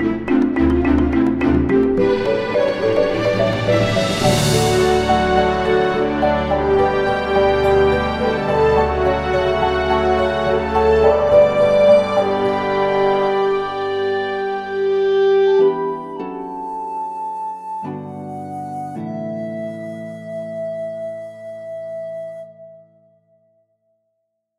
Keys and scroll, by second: 10.7 ctrl+shift+z.